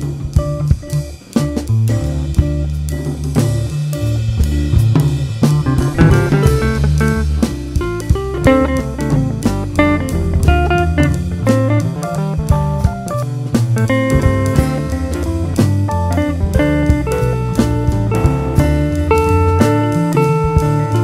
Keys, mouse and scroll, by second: 0.5 alt+a, 0.7 `, 4.9 click, 5.5 `, 6.1-6.8 scroll down 2, 6.8 `, 8.1 ctrl+r, 9.8 scroll down 1, 10.4-10.8 scroll up 1, 11.5 Tab, 12.1 `, 13.0 click, 13.5 KP_Decimal, 13.8 scroll down 1, 14.4 scroll down 2, 14.6 `, 14.9 scroll down 2, 15.4 scroll up 2, 15.6 `, 16.6 scroll down 2, 17.2 ctrl+r, 18.6-19.2 scroll up 2, 19.2 alt+a, 19.6 click, 20.1 shift+click, 20.6 j.